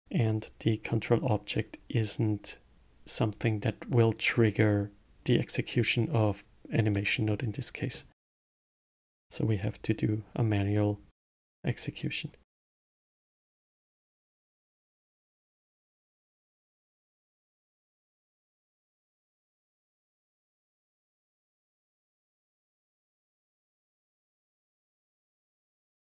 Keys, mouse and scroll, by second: 6.9-9.0 middle drag, 9.0 click, 9.7 click, 11.1 middle click, 12.0 click, 14.3 middle click, 14.9 click, 15.6 click, 17.0 middle click, 17.7 click, 19.6-22.5 drag, 22.7 scroll down 1, 23.3-26.1 middle drag.